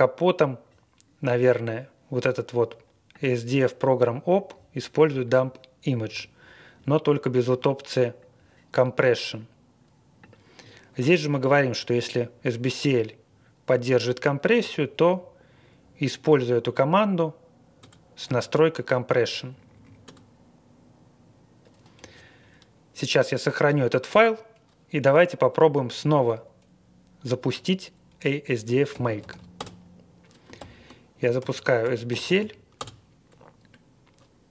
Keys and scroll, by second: 11.1 Page_Up, 14.5 Page_Down, 15.0 Page_Down, 17.8 Return, 18.2 Up, 18.5 Right, 18.7 Right, 18.8 Right, 18.8 Right, 18.8 Right, 18.9 Right, 18.9 Page_Up, 18.9 Tab, 19.1 Tab, 19.3 Tab, 20.0 Return, 21.9 Escape, 28.6-29.8 typing, 30.5 ctrl+l, 31.3-32.9 typing, 33.0 ctrl+r.